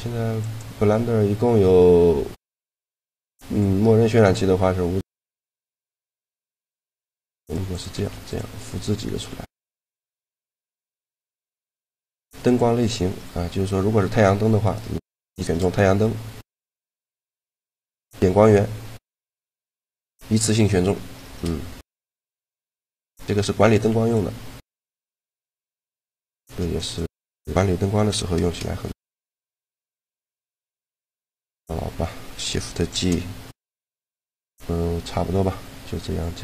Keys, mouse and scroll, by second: 0.1-1.9 drag, 4.9-6.7 drag, 5.7-6.9 middle drag, 5.7 right click, 7.2 shift+d, 7.7 shift+d, 9.0 shift+d, 10.2 a, 10.9 shift+g, 14.4-16.1 right drag, 15.2 shift+g, 18.1 g, 19.8 g, 21.2 shift+g, 22.0 shift+g, 23.4-25.2 drag, 23.7 g, 24.9 g, 26.1 shift+d, 28.2 shift+g, 29.9 g, 32.8 shift+g.